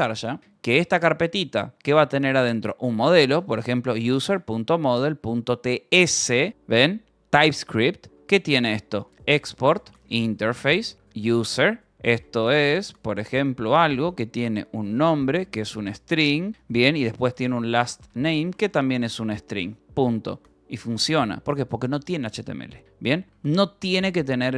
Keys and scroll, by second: 0.7 j, 1.0 Return, 1.8 a, 3.2-6.5 typing, 5.9 Return, 7.8-20.2 typing, 11.6 Return, 20.1 ctrl+s, 21.4 Return, 22.8-24.5 typing.